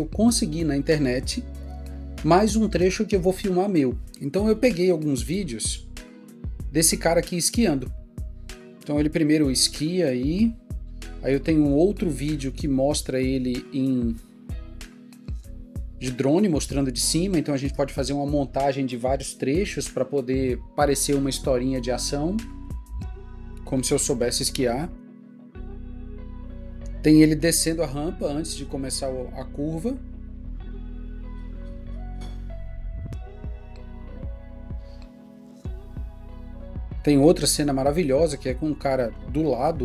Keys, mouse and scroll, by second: 4.9 double click, 13.7 double click, 25.1 double click.